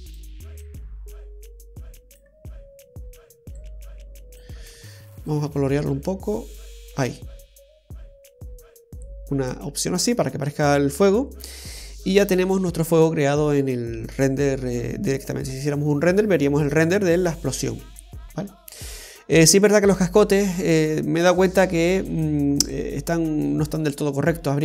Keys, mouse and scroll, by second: 0.8 click, 3.8 click, 5.4 click, 9.9-10.7 scroll down 1, 10.7-12.5 scroll up 3, 12.5 scroll down 2, 13.2-13.9 scroll down 2, 14.3 middle click, 21.2-22.3 scroll up 2, 22.3 click, 22.8 right click, 23.8-24.6 scroll down 2.